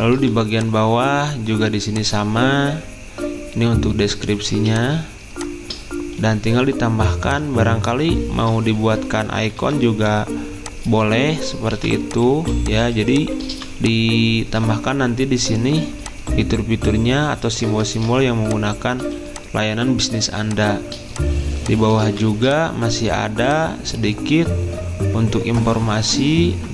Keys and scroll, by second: 6.8-7.5 typing, 9.6 i, 11.7-13.5 typing, 18.0 ctrl+d, 19.0 z, 20.2 v.